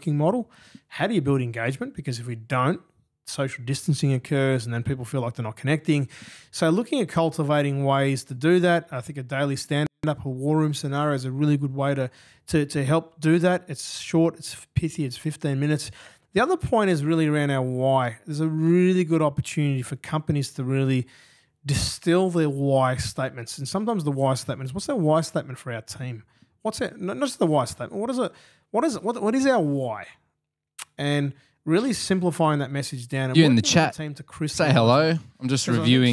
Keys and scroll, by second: 5.6 super+Tab, 7.5 super+Tab.